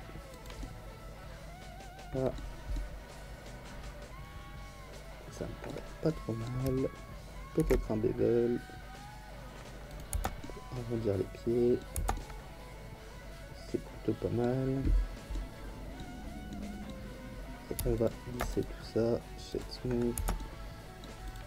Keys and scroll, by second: 7.6 ctrl+b, 10.1 Tab, 20.1 Tab.